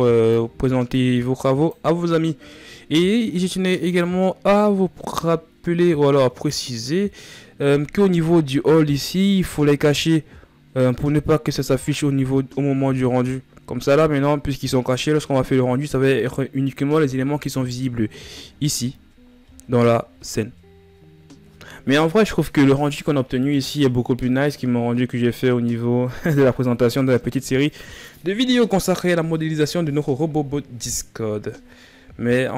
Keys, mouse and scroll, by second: 10.7 click, 11.3-14.4 drag.